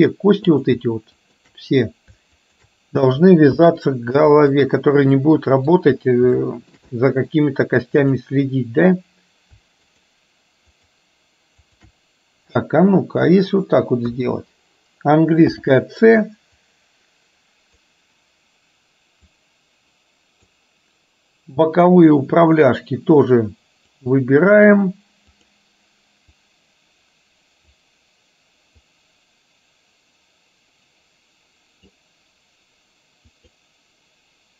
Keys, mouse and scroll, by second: 0.7 click, 1.3 shift+click, 2.5 shift+click, 3.5 ctrl+p, 5.3 middle click, 6.5 shift+middle click, 7.0 middle click, 8.3 click, 9.9 shift+click, 10.8 shift+click, 11.7 shift+click, 14.0 KP_1, 15.5 c.